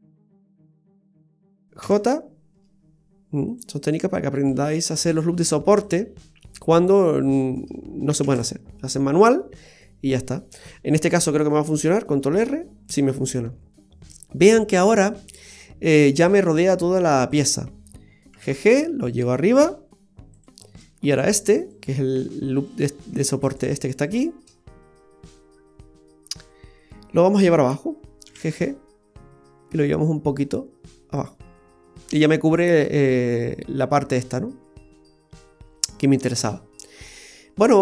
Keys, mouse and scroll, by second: 0.5 click, 0.5 right click, 0.8 shift+right click, 1.8 j, 3.5 click, 4.3 right click, 5.8 click, 6.9 right click, 7.4 shift+right click, 8.2 x, 8.9-9.4 scroll down 1, 9.4 middle click, 12.3 ctrl+r, 21.0 right click, 21.5 alt+shift+right click, 23.1 shift+right click, 23.5 alt+shift+right click, 24.6-25.3 scroll down 5, 25.3 middle click, 28.2 g, 31.5-32.1 scroll down 2, 31.7-32.1 scroll up 1, 32.1 scroll down 1, 32.3 middle click, 36.0-36.9 scroll up 3, 36.9 middle click, 36.9-37.6 scroll up 1.